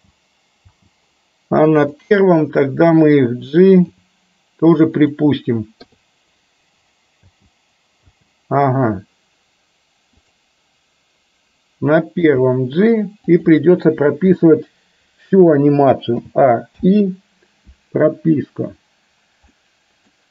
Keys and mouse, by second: 0.8 space, 3.9 g, 5.9 i, 7.3 space, 8.1 space, 10.2 click, 12.3 g, 16.2 a, 16.8 i, 19.6-20.2 middle drag.